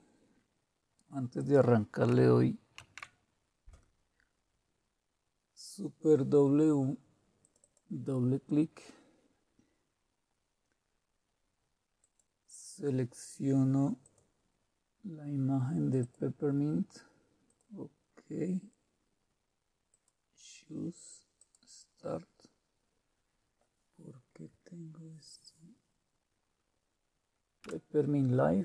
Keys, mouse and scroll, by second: 1.4 click, 2.4 click, 2.8 super+w, 7.4 click, 7.9 click, 12.0 click, 14.0 click, 16.0 click, 17.5 click, 19.9 click, 27.6 Return.